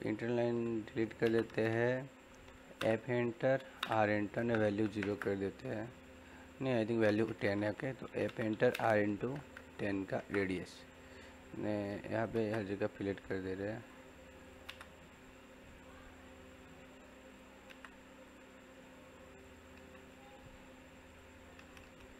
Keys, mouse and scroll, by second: 0.3 e, 1.2 space, 2.4 f, 2.7 space, 3.4 r, 3.7 space, 8.0 f, 8.2 space, 8.4 r, 8.6 space, 11.0 click, 12.2 space, 12.6 click, 14.4 click, 14.6 space, 15.7 click, 17.6 space, 18.2 click.